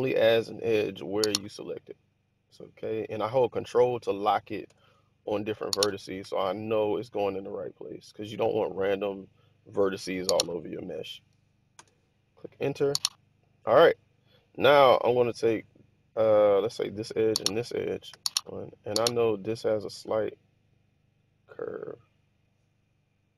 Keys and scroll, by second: 4.5 Return, 6.1 k, 11.6 Return, 18.1 1, 19.9 r.